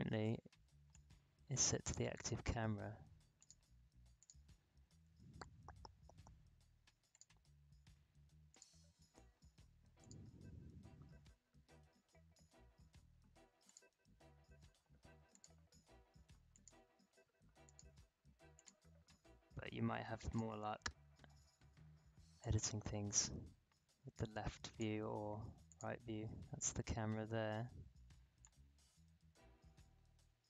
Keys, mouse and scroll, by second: 0.9 click, 7.1 click, 13.6 click, 13.6-25.6 drag, 28.4-30.4 drag.